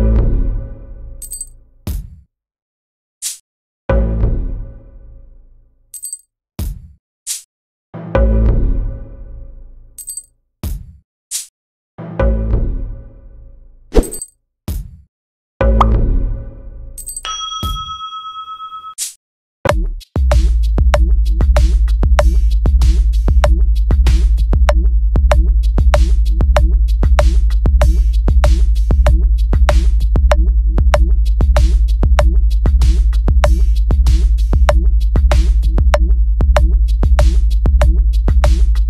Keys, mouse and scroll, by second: 2.9 click, 3.8 click, 6.7 click, 7.7 click, 9.3 click, 10.2 click, 11.4-11.7 drag, 13.8 click, 15.2 click, 15.7 right click, 19.2 click, 21.3 click, 22.1 click, 22.6 click, 24.4 click, 25.2-26.3 drag, 27.4 click, 29.5 click, 32.1 click, 32.7 click, 34.5 shift+e, 36.2 click, 37.1 click, 38.2 click.